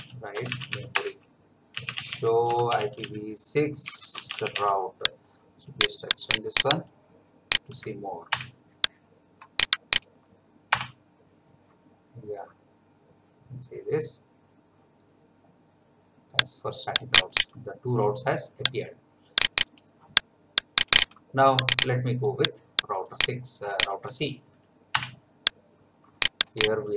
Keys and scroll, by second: 0.0-5.6 typing, 8.3 Return, 10.7 Return, 24.9 Return.